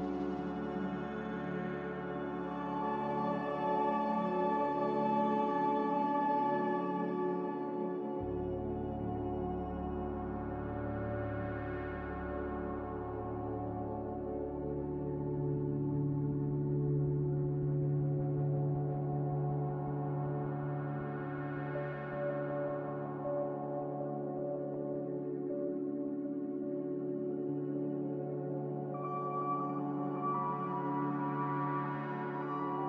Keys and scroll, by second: 3.1 ctrl+c, 6.4 ctrl+v.